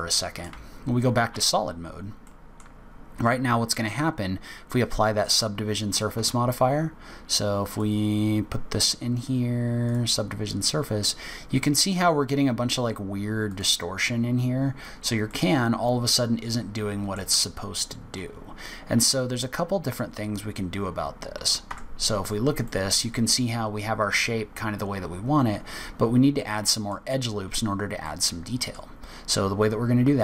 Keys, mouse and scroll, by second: 0.0 middle click, 0.4 z, 1.8-2.2 scroll down 3, 2.2 middle click, 3.0-3.4 scroll up 1, 5.2 click, 5.8 click, 6.1 Tab, 7.6 click, 10.9-11.4 scroll up 2, 13.4 click, 14.8-15.1 scroll down 3, 15.2 middle click, 20.3-21.4 scroll up 2, 21.4 scroll up 1, 21.6 Tab, 22.6 middle click, 25.1 scroll up 2, 25.9-26.2 scroll down 1, 26.3 middle click, 28.0 middle click.